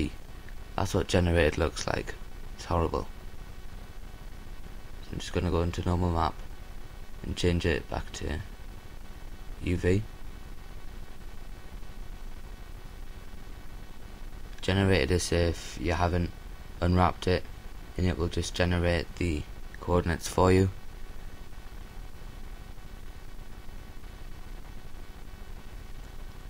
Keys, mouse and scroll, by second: 1.9 right click, 7.9-23.1 drag.